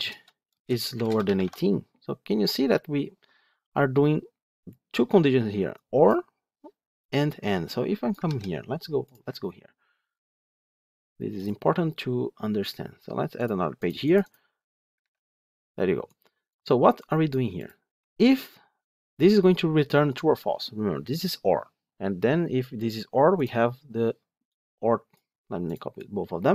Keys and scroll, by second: 0.0 Return, 8.1 ctrl+c.